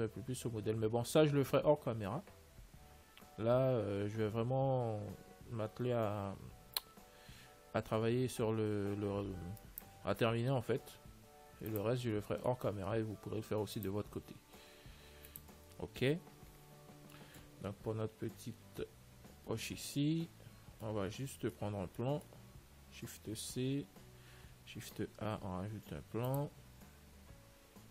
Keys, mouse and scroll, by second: 10.8-14.0 middle drag, 11.8 ctrl+s, 14.0-17.3 drag, 16.4 n, 17.4 middle click, 18.1-19.6 middle drag, 18.1 z, 19.6 z, 19.7 middle click, 19.9 middle click, 20.1-25.0 middle drag, 23.7 shift+c, 25.0 shift+a.